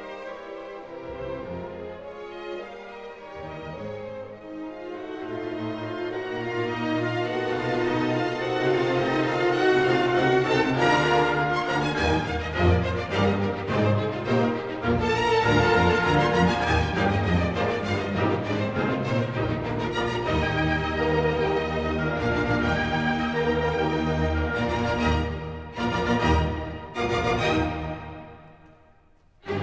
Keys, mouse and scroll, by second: 0.6 Escape, 0.9 Escape, 2.5 click, 5.1 ctrl+middle click, 7.1 middle click, 8.3-8.6 ctrl+scroll, 13.7 click, 14.9-15.4 scroll, 16.3 click, 17.0-18.3 scroll, 20.2 click, 21.0 ctrl+scroll up 1, 22.1-22.6 scroll up 1, 22.6-22.9 scroll, 23.9 click, 26.3 click, 27.9 click, 29.5 click.